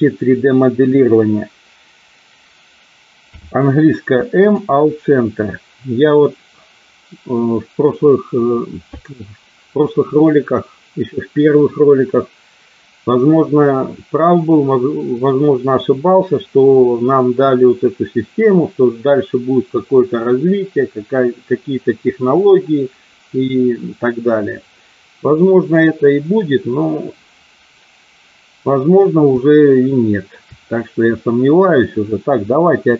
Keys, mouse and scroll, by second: 3.2 m, 29.5 shift+middle click, 32.8 k.